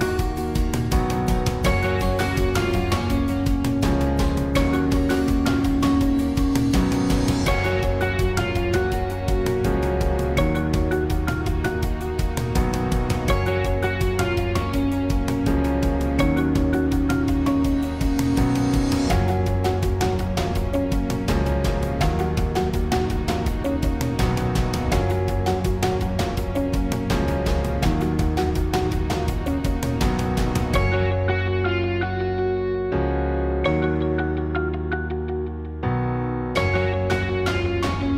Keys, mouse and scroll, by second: 0.2 s, 0.9 click, 0.9 s, 1.4 middle click, 2.1 click, 2.3 s, 3.1 middle click, 3.2 click, 3.7 s, 4.5 click, 6.7 middle click, 7.6 middle click, 8.4 click, 9.4 middle click, 10.6 right click, 10.6 click, 11.5 right click, 11.7 middle click, 11.9-12.3 drag, 12.5-13.9 drag, 13.1 right click, 13.9 middle click, 14.1 click, 14.1 right click, 14.1 middle click, 14.3 right click, 14.7 e, 17.1 right click, 17.2 e, 17.5 click, 19.2 s, 20.9 click, 22.6-24.0 drag, 24.7-26.6 drag, 26.0 right click, 26.4 middle click, 27.5-30.3 drag, 28.2 right click, 29.1 right click, 29.3 right click, 33.9 click, 34.5 Tab, 34.6 middle click, 35.0 Tab, 35.2 Tab, 36.3 ctrl+r.